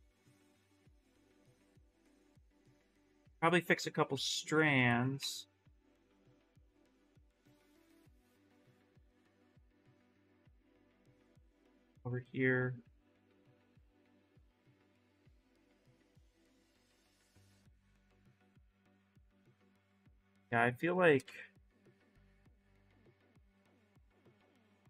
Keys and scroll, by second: 4.4 ctrl+z, 4.6 ctrl+z, 6.7 ctrl+z, 7.0 ctrl+z, 7.1 ctrl+z, 8.5 ctrl+z, 9.7 w, 16.7 q, 17.0 s, 18.5 ctrl+z, 19.2 ctrl+shift+z, 21.0 ctrl+z.